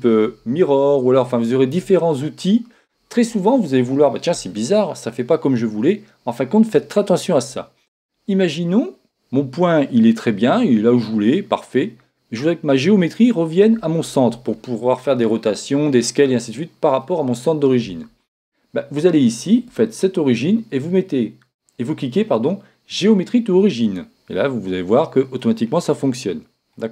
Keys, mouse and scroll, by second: 19.6-21.6 drag, 25.4-26.9 middle drag.